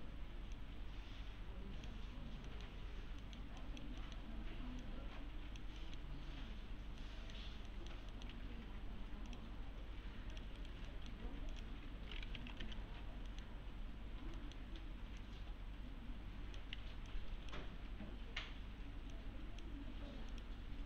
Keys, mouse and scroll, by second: 2.5 middle click, 3.6 click, 4.0 middle click, 4.8-5.8 click, 5.8 middle click, 6.1-7.0 scroll down 1, 7.0 middle click, 8.3 alt+1, 9.3 click, 10.6 right click, 10.9 alt+middle click, 11.3-13.1 typing, 11.5 click, 12.9 scroll down 1, 13.3 middle click, 14.1-14.4 scroll down 1, 14.4 middle click, 14.6-15.2 scroll down 1, 15.2-16.8 click, 16.8 1, 17.1-17.7 click.